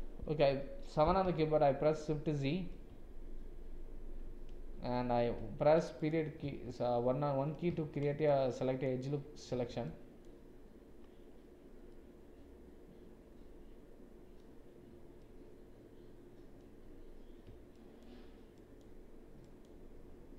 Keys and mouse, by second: 0.5 KP_7, 1.4 shift+z, 6.7 shift+z, 7.7 shift+z, 8.3 click, 9.9 shift+click, 11.9 click, 13.3-14.3 middle drag, 15.2-16.5 middle drag, 18.6 shift+click, 19.5 shift+click.